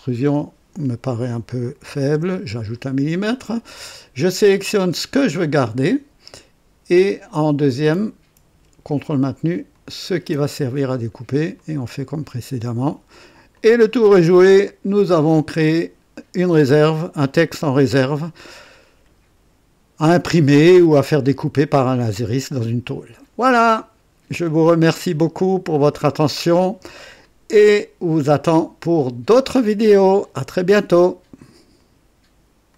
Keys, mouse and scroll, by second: 1.8 KP_3, 2.1 Return, 5.3 click, 9.7 ctrl+click, 11.5 click, 13.5 click, 14.0-16.2 drag, 16.6-23.5 drag, 23.7-25.2 drag, 25.3-26.7 drag, 27.2-28.5 drag, 28.8 click, 31.7 right click, 32.7 click.